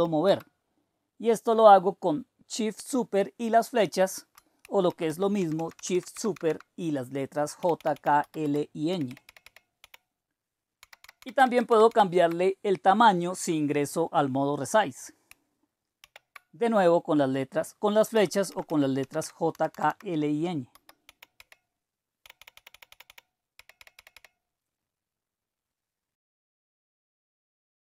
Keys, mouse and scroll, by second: 0.0-0.4 typing, 4.8 shift+super+Up, 5.2 shift+super+Up, 5.3 shift+super+Down, 6.3 shift+super+Left, 7.6 super+k, 7.7 super+k, 7.9 super+k, 8.4 super+j, 8.6 super+j, 8.9 super+l, 9.2 super+l, 9.8 super+k, 10.8 super+ñ, 11.0 super+ñ, 11.2-11.9 super+ñ, 16.0 super+r, 18.1 Up, 18.3 Up, 18.4 Up, 18.6 Up, 19.0 Down, 19.2 Down, 19.5 Right, 19.7 Right, 19.8 Right, 20.4-24.6 typing.